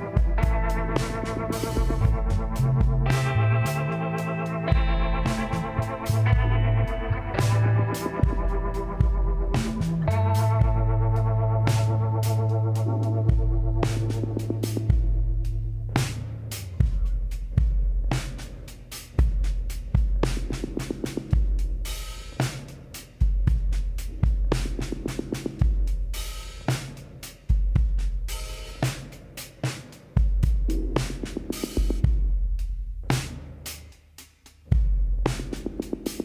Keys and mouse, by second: 0.2-1.9 middle drag, 1.6 z, 3.8 middle click, 4.6 KP_7, 5.3 z, 8.2 e, 12.5-14.7 drag, 15.4 e, 20.5 s, 23.0 e, 28.5-30.2 drag, 31.9 e, 35.3 e.